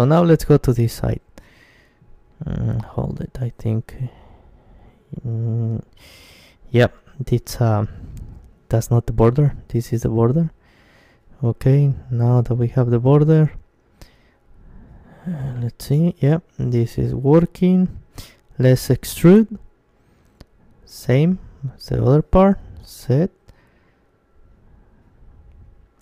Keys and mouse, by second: 0.9 click, 3.1-5.6 right drag, 5.6 middle click, 6.6-7.8 middle drag, 7.8-11.9 right drag, 11.8-14.5 middle drag, 14.3 ctrl+KP_1, 14.5 click, 16.4 e, 16.8-18.7 drag, 16.9 s, 25.2-26.0 drag.